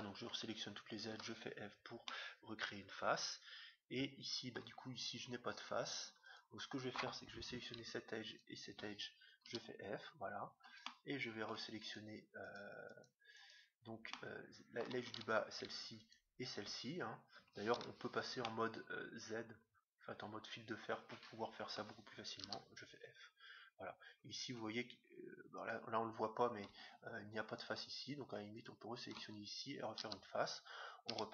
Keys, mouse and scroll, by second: 1.1 f, 2.0-3.9 middle drag, 5.4-7.4 middle drag, 6.3-8.0 right drag, 8.2-10.0 right drag, 9.5 f, 10.8 middle click, 11.8 click, 11.8-15.1 right drag, 14.1 click, 14.4-15.8 middle drag, 16.0-17.7 right drag, 17.7 z, 18.3-20.2 middle drag, 22.4 f, 23.7-26.1 middle drag, 25.6-27.2 right drag, 27.5-30.3 right drag, 30.0 f, 31.0 z.